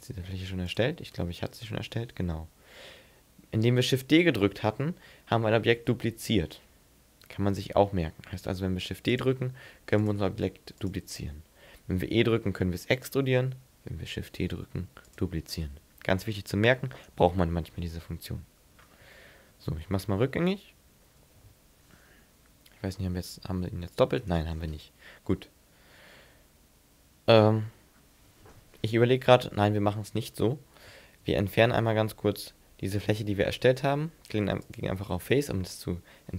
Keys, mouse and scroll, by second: 0.7 click, 1.5 right click, 5.8 shift+d, 9.2 click, 9.5 shift+d, 10.1 click, 10.4 shift+d, 10.9 click, 12.1 e, 13.1 click, 14.2 shift+d, 15.2 click, 17.2 z, 18.1 middle click, 19.5 ctrl+z, 19.9 ctrl+z, 20.1 ctrl+z, 20.4 ctrl+z, 20.7 ctrl+z, 22.1 z, 23.1 g, 24.3 right click, 24.8 middle click, 31.3 x, 32.8 x.